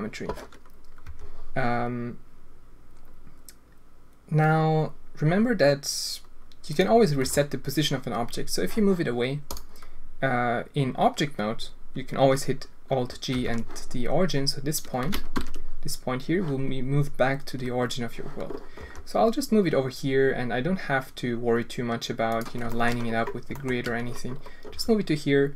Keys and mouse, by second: 1.0 g, 7.2 g, 13.3 alt+g, 15.3 ctrl+z, 18.8 g, 22.7 shift+middle drag, 23.6 shift+middle click, 24.7 g.